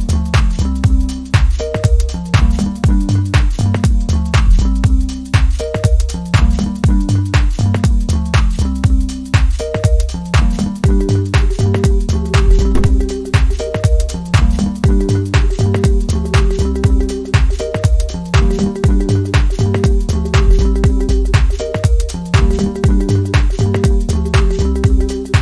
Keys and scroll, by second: 0.5 scroll down 1, 0.9 scroll up 1, 1.0-1.3 scroll down 1, 1.4-1.9 scroll up 1, 6.4-6.8 scroll down 1, 8.5 scroll up 1, 9.6-9.9 scroll down 1, 10.6-11.0 scroll down 1, 11.0-11.4 scroll up 1, 11.6-12.0 scroll up 1, 12.3 scroll down 1, 12.4 scroll up 1, 12.5 scroll down 1, 12.7 scroll up 1, 12.7 scroll down 1, 12.9 scroll up 1, 13.1 scroll down 1, 13.2-13.6 scroll up 1, 13.7 scroll down 1, 13.9 scroll up 1, 14.4 scroll down 1, 14.6 scroll up 1, 14.8 scroll down 1, 16.2-16.8 scroll up 1, 18.9-19.3 scroll up 1, 21.9 scroll down 1, 22.4 scroll up 1, 22.6 scroll down 1.